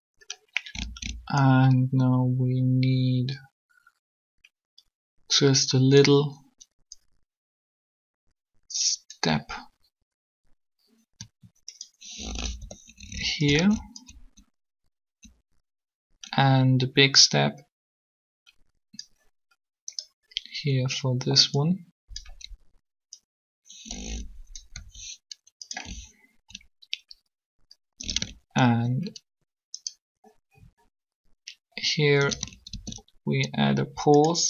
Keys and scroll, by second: 12.6 shift+r, 24.7 r, 32.7 shift+d.